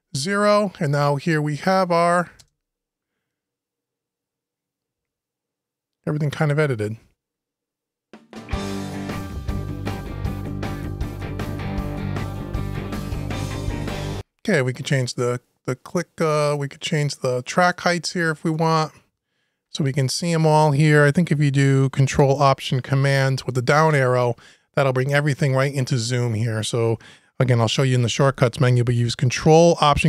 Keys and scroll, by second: 23.6 ctrl+alt+super+Down.